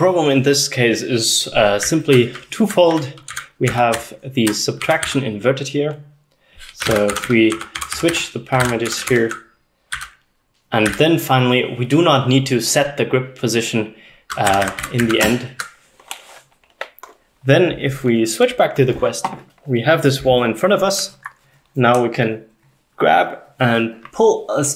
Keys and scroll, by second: 1.6-5.1 typing, 6.6-10.1 typing, 14.3-15.3 typing.